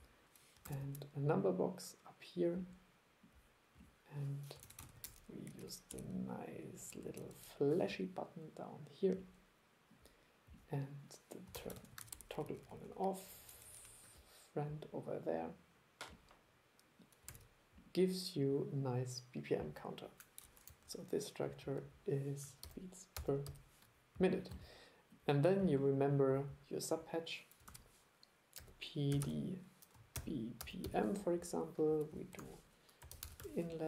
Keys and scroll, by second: 0.7 super+3, 4.7 super+c, 4.9 super+v, 11.6 super+c, 11.8 super+v, 17.3 super+e, 20.7 super+5, 27.7 super+1, 32.4 super+1.